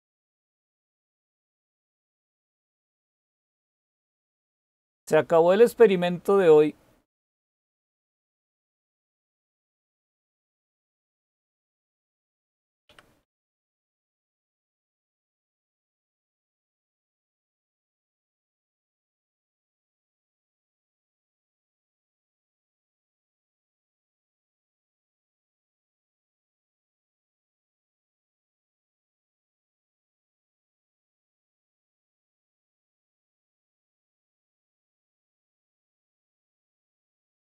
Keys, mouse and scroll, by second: 1.7-2.5 typing, 10.3-13.0 typing, 13.6 Return, 21.5-22.6 typing, 25.0 typing, 31.7 typing.